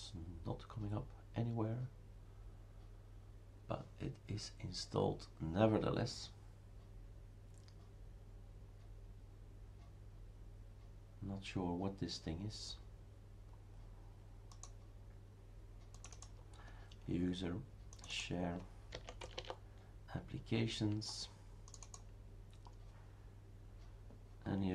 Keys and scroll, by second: 18.7-19.8 typing.